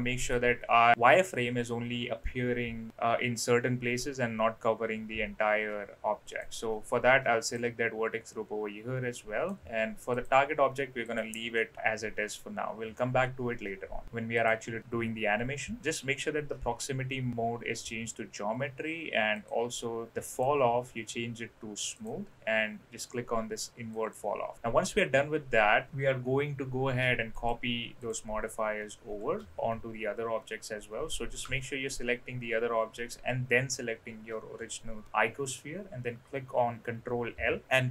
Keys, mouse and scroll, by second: 6.3-7.5 drag, 9.1 middle click, 10.1-11.2 drag, 11.5 middle click, 14.0 click, 19.4 click, 20.3-22.0 drag, 23.9 click, 27.4 shift+click, 28.0 shift+click, 37.3 ctrl+l.